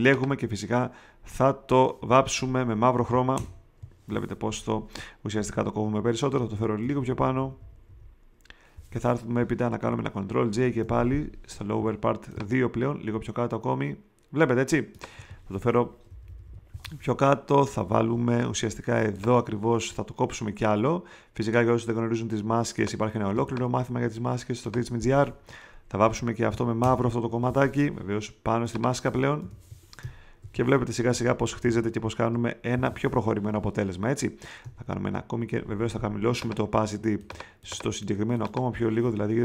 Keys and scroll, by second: 3.3 alt+BackSpace, 5.3 super+d, 6.3 super+v, 10.5 super+j, 16.0 shift+Down, 17.8 m, 23.3 space, 26.8 alt+BackSpace, 29.4 alt+BackSpace, 30.0 alt+super+BackSpace, 30.4 alt+super+d, 31.1 super+v, 31.6 shift+Up.